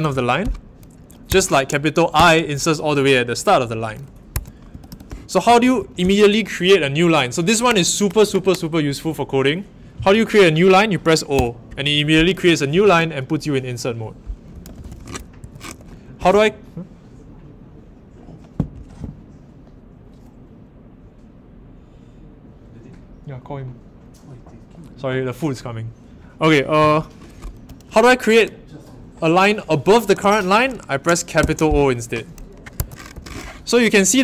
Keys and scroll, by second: 1.2 Home, 2.1 shift+Tab, 11.3 o, 14.2-15.6 typing, 15.4 Escape, 31.4 shift+o, 32.7 Escape, 33.1 u.